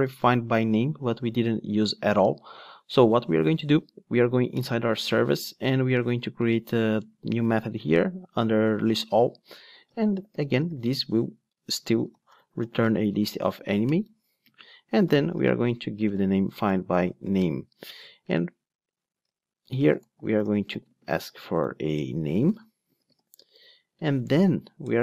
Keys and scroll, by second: 4.0 Right, 4.2 Down, 13.9 Return.